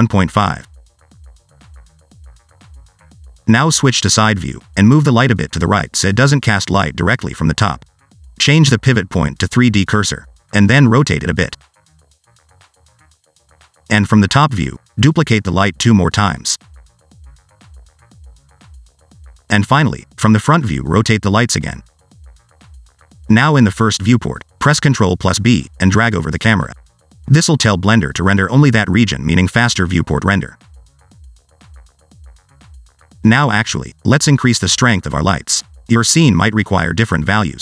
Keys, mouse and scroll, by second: 0.8 click, 3.1 click, 4.8 shift+middle click, 5.0-5.5 scroll up 1, 6.1 click, 8.4 click, 10.5 r, 11.3 g, 14.0-14.4 scroll down 1, 14.6 shift+d, 16.4 r, 17.5 shift+d, 20.0 click, 20.4 r, 21.4 click, 21.6 r, 22.8 shift+click, 23.1 click, 26.0 ctrl+b, 30.7 scroll up 1, 34.1 click, 34.3 click, 35.1 0, 35.9 click, 36.7 click, 37.4 0.